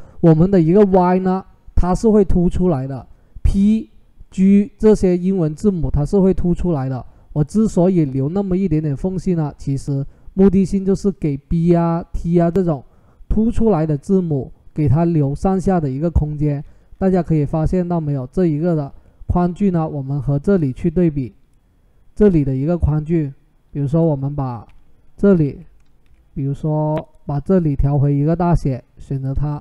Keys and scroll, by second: 24.5 Escape, 25.2 Escape, 25.8 Escape.